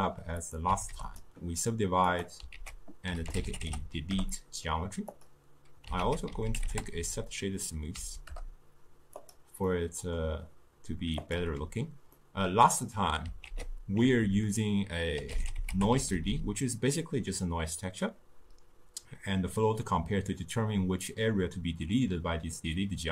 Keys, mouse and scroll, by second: 1.1 click, 2.3-5.2 drag, 5.2 ctrl+a.